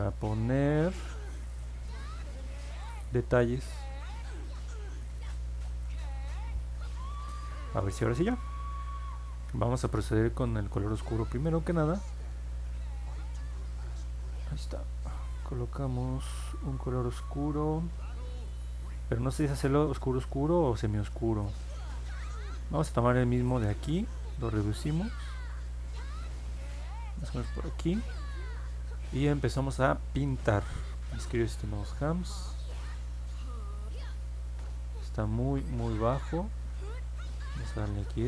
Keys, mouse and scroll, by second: 0.7 click, 2.8-3.7 typing, 5.0 a, 6.0 e, 6.4 s, 24.9-27.2 drag, 32.8-34.9 drag, 36.4 ctrl+z, 37.4 click.